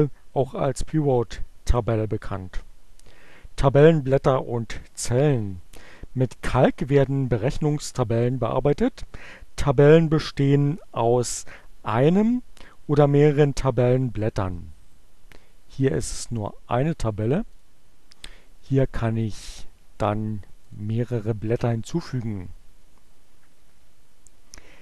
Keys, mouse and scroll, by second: 17.4 click, 18.5 click, 20.4 click.